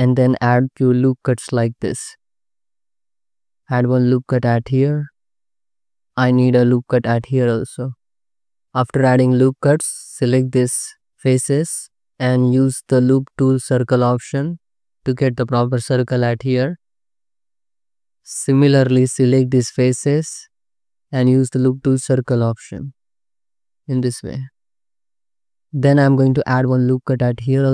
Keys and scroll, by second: 1.5 ctrl+r, 2.3 ctrl+z, 2.6 ctrl+r, 4.5 ctrl+r, 6.8 ctrl+r, 9.9 3, 18.1 3, 25.0 Tab, 26.2 ctrl+r.